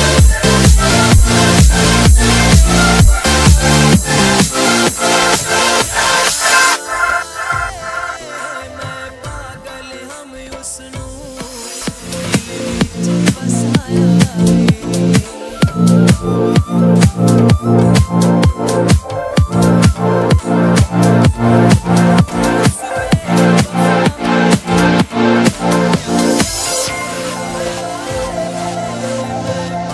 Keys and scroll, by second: 6.7 Escape, 22.3 space, 23.4 ctrl+z, 23.8 space, 24.7 ctrl+z, 27.5 F4, 28.0 Escape.